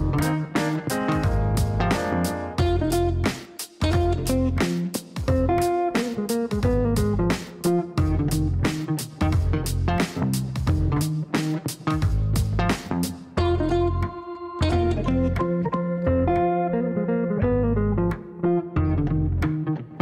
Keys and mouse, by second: 0.5 click, 1.0 click, 2.6 Right, 3.8 BackSpace, 4.0 f, 6.2 click, 6.4 click, 6.5 click, 8.9 KP_1, 9.0 KP_0, 9.4 KP_Enter, 19.9 click.